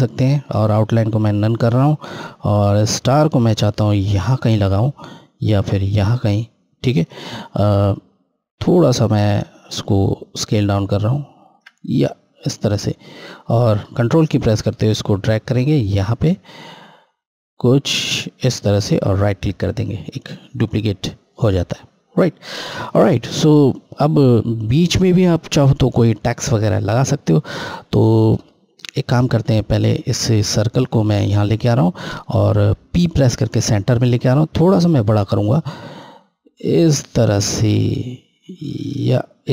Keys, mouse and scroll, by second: 1.5 right click, 2.5 click, 7.5 scroll, 7.6 scroll up 1, 10.0 shift+click, 12.1 scroll, 12.3-13.0 scroll down 1, 14.0 click, 14.1 click, 19.3 ctrl+right click, 20.7 click, 27.9-29.6 scroll down 1, 30.4 click, 33.2 p, 34.5 scroll, 34.6 scroll up 1, 35.9 shift+click.